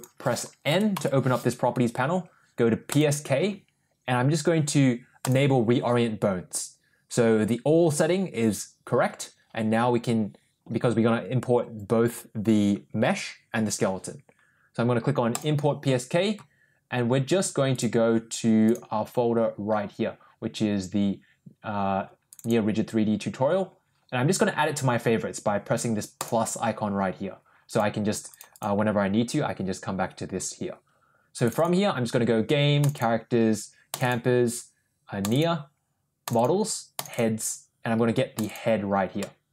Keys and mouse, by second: 0.6 n, 0.8 n, 2.8 click, 5.1 click, 15.2 click, 39.1 middle click.